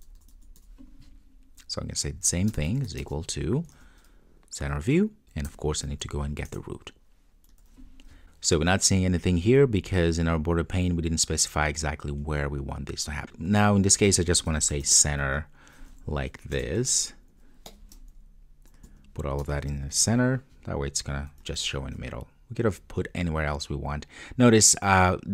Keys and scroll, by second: 3.8 super+v, 6.5 Return, 7.6 Return, 7.6 super+s, 16.6 Return, 21.5 super+s, 22.7 super+F2, 23.4 super+F2.